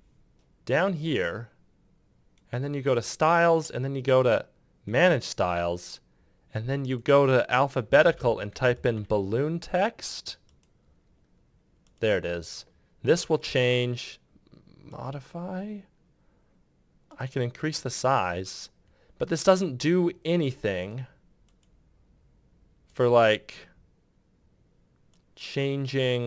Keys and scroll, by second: 8.4-9.2 typing.